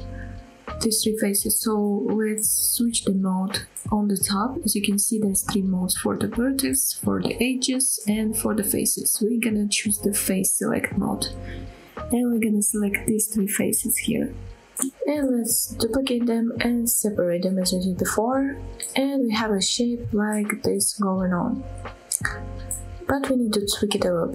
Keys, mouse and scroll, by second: 13.2 middle click, 13.2 scroll down 1, 13.2 scroll up 2, 13.3 shift+middle click, 13.5 click, 14.2 shift+click, 14.7 shift+click, 15.1-15.4 scroll down 1, 15.4 middle click, 16.1 shift+d, 16.4 click, 16.4 right click, 17.4 p, 18.6 Tab, 19.1 click, 19.5 middle click, 19.8-20.3 scroll up 2, 20.3-21.2 middle drag, 21.4-22.1 middle drag, 22.5 Tab, 23.6 middle click.